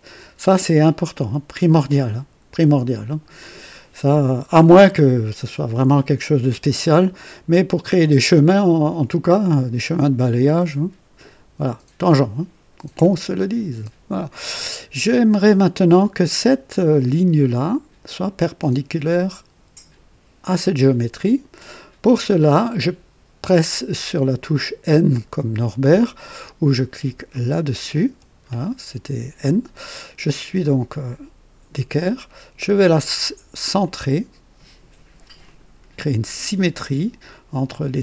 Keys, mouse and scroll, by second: 3.3-4.0 right drag, 18.0 click, 20.4 click, 27.3 click, 28.0 n, 29.8 right click, 30.6-31.9 drag, 33.8 click, 35.4 click.